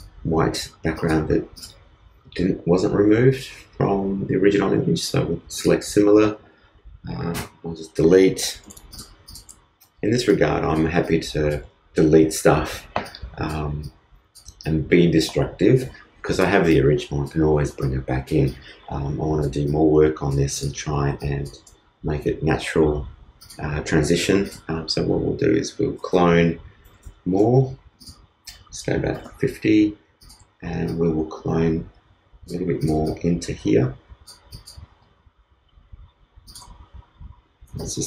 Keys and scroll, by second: 8.1 super+BackSpace, 8.4 super+d, 8.6 super+space.